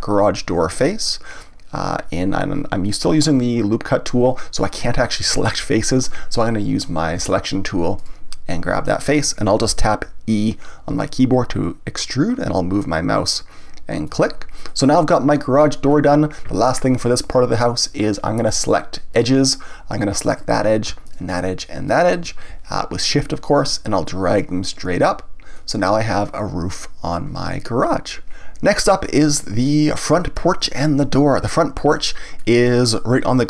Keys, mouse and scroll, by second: 0.6 click, 7.2 click, 8.0 click, 8.7-10.9 middle drag, 10.9 e, 14.1 click, 14.7-17.7 middle drag, 19.1 click, 20.3 click, 21.0 shift+click, 21.9 shift+click, 24.4-27.4 drag, 29.6-31.0 middle drag, 31.0-31.5 scroll up 1, 31.5-33.4 shift+middle drag.